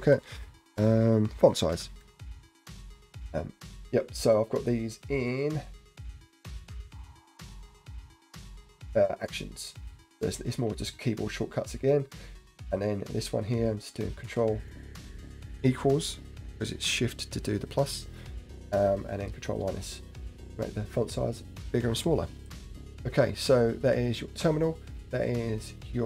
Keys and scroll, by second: 0.1 ctrl+f.